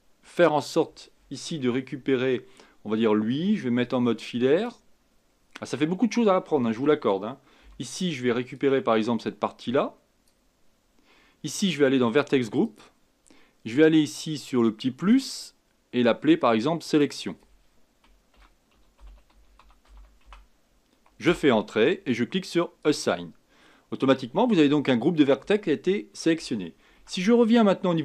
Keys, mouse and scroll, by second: 1.4-2.0 scroll up 3, 2.0 Tab, 3.8 z, 6.7 a, 7.6 b, 12.6 click, 15.1-17.0 drag, 17.1-20.2 drag, 22.8-26.0 drag, 27.0 Tab.